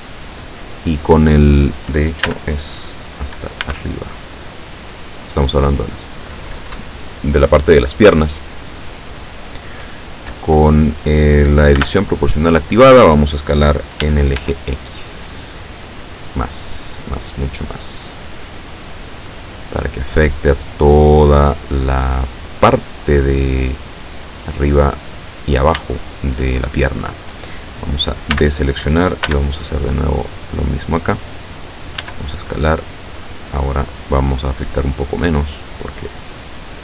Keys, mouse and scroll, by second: 2.3 a, 3.7 b, 4.2-5.7 drag, 11.9 o, 14.1 s, 14.5 x, 15.8 scroll up 2, 16.6-17.2 scroll down 4, 17.6-18.3 scroll down 2, 18.5-18.9 scroll down 1, 19.1-19.4 scroll down 1, 25.2 click, 26.0-27.5 shift+middle drag, 28.4 a, 29.3 b, 30.2-31.2 drag, 32.1 s, 33.1-33.9 scroll up 2.